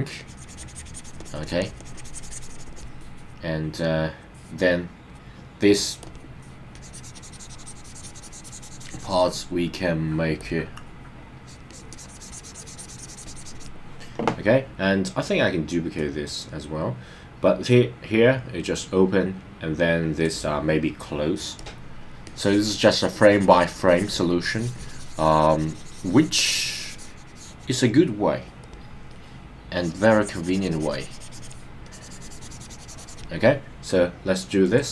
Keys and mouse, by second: 0.2-1.5 drag, 1.6 click, 1.9 click, 6.1 click, 6.8 click, 10.4 click, 11.4 click, 11.7 click, 11.9-13.7 drag, 15.9-20.3 drag, 21.6 click, 22.2 click, 24.4 click, 28.6 click, 29.6-31.5 drag, 31.8-33.3 drag, 34.7 click.